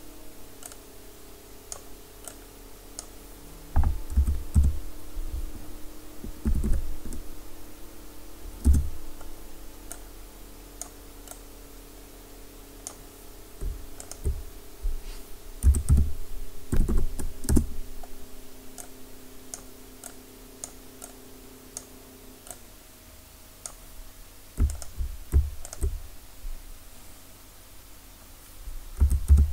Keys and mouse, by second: 4.2 r, 9.9-14.0 drag, 14.0-15.6 right drag, 15.6 r, 19.5-20.6 drag, 29.0 r.